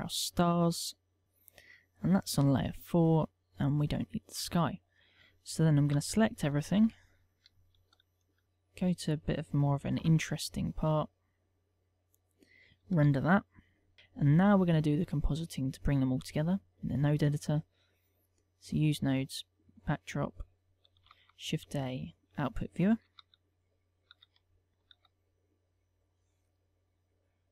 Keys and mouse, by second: 2.9 click, 4.0 click, 6.1 1, 6.6 shift+2, 7.1 shift+3, 7.7 shift+4, 8.4 click, 8.9 click, 10.1 alt+a, 11.6 click, 13.7 F12, 14.7 click.